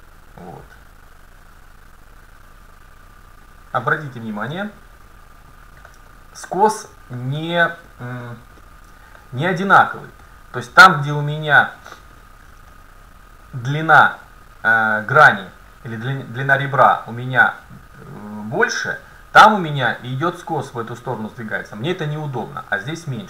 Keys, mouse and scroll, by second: 3.5-5.4 drag, 4.0 middle click, 4.7 middle click, 8.4 scroll up 1, 8.5 scroll down 1, 9.9 middle click, 10.4 scroll up 1, 10.5-11.7 scroll down 1, 12.2 scroll down 1, 12.3-12.6 scroll up 1, 14.3-15.1 scroll up 1, 19.5-21.4 middle drag.